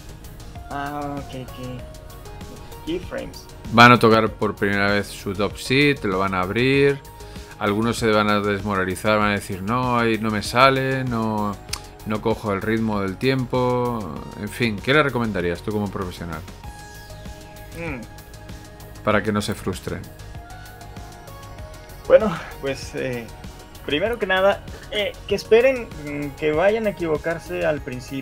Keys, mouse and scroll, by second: 14.3 shift+middle click, 15.5-19.6 scroll up 1.